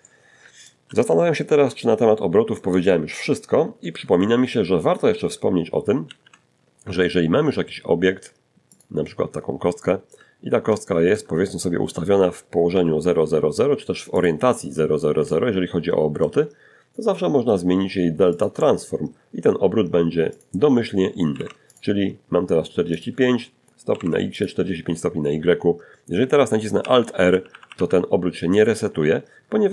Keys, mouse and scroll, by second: 0.0-1.0 shift+middle drag, 4.3 shift+a, 7.0 click, 7.6 scroll up 1, 8.0 shift+middle click, 8.5-8.9 shift+scroll up 1, 9.0 shift+middle click, 10.9 n, 12.4 click, 13.5-14.6 ctrl+middle drag, 15.2-15.9 ctrl+scroll down 3, 16.6 click, 17.3-17.8 scroll down 2, 18.6 click, 19.5 4, 19.9 click, 19.9 5, 21.2 click, 21.9-22.7 typing, 22.6 click, 25.0 alt+r, 25.5 alt+r.